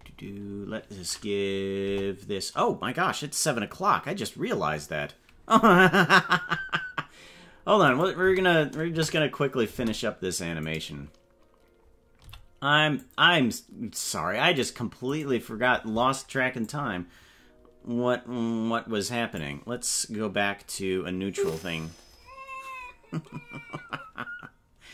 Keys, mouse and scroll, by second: 1.8 KP_0, 7.8 click, 8.2 space, 8.9 KP_0, 9.7 space, 11.1 right click, 12.2 c, 16.6-19.4 drag.